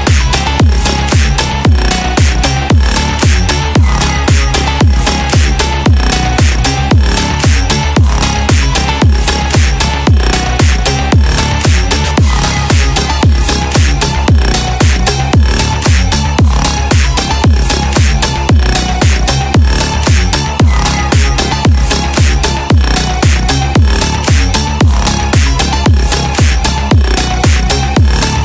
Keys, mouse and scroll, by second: 1.7 click, 2.3 click, 2.8 click, 3.4 click, 4.9 click, 5.7-7.1 middle drag, 7.3 scroll down 2, 7.6-9.2 middle drag, 9.6 middle click, 10.9 shift+a, 20.0 shift+a, 28.1-28.4 drag.